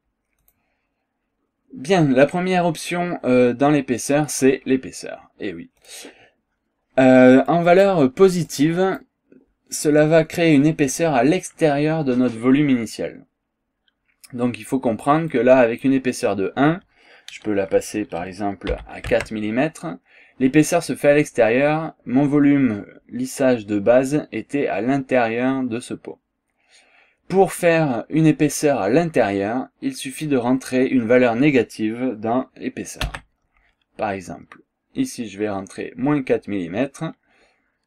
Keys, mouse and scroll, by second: 0.5 click, 5.8 click, 7.5 click, 8.5 click, 12.6 scroll down 1, 12.9 scroll up 1, 15.3 click, 18.7 KP_4, 19.1 Tab, 26.4 scroll down 1, 26.7 scroll up 1, 27.5 scroll up 1, 30.1 click, 33.1 KP_Subtract.